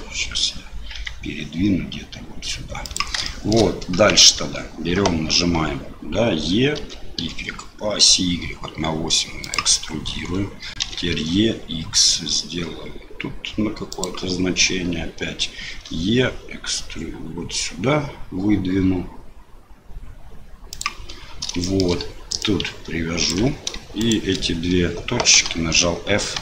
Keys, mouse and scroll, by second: 0.9 g, 3.4 shift+click, 3.9 Tab, 6.8 e, 10.8 e, 15.7 e, 21.7 shift+middle click, 22.5 ctrl+click, 24.0 shift+click, 25.3 f.